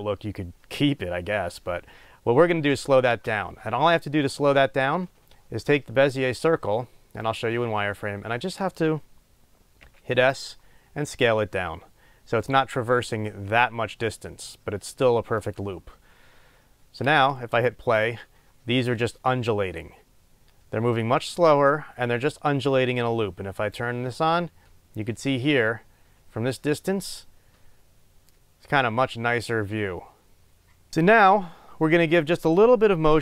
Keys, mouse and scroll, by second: 3.1 space, 6.0 click, 7.2 click, 7.7 scroll up 1, 10.5 s, 15.8 click, 16.6-17.0 scroll down 1, 17.0 space, 23.6 click, 30.9-32.1 middle drag.